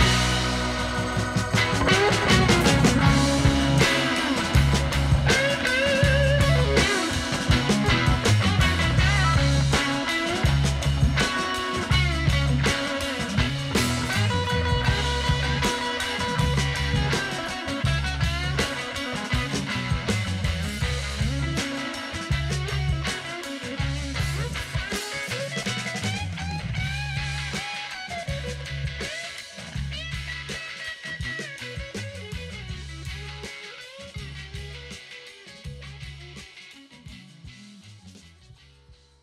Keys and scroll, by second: 2.8 ctrl+=, 12.0 ctrl+-, 31.4 ctrl+-, 36.1 ctrl+-, 36.6 ctrl+-, 36.7 ctrl+=.